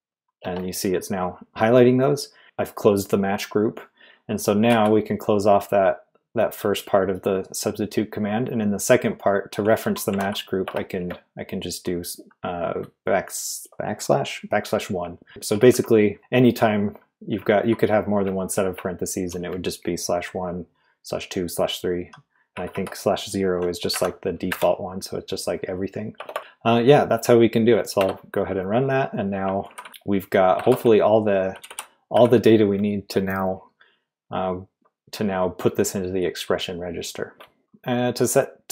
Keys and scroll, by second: 4.7 typing, 9.8-11.5 typing, 15.3 Left, 15.5 Left, 15.7 Left, 15.8 Left, 16.1 Right, 16.6 Left, 17.3 Left, 18.2 Right, 18.7 Right, 19.0 Right, 19.1 Right, 22.5 Left, 22.7 Left, 23.9 \, 24.5 0, 26.1 BackSpace, 26.3 BackSpace, 26.4 Right, 26.4 g, 28.0 Return, 29.6-32.1 typing, 33.4 typing, 37.3-38.1 typing.